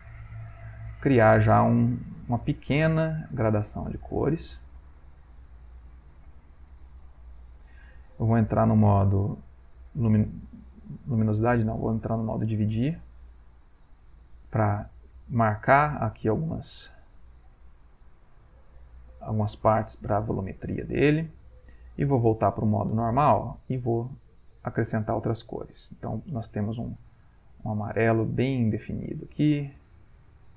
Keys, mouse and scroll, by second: 4.9-8.4 drag, 8.6-11.3 drag, 15.1-30.5 drag.